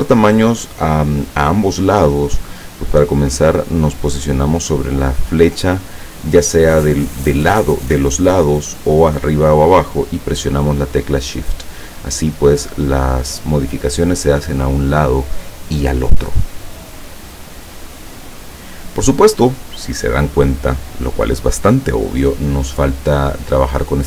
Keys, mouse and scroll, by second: 12.4 click, 17.1-18.3 middle drag.